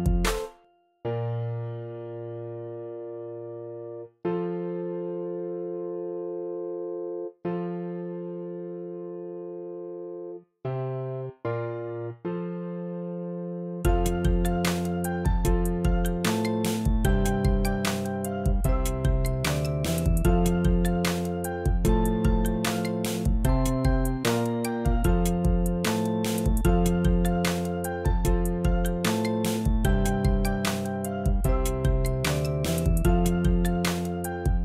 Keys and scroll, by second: 26.7 super+x, 27.5 x.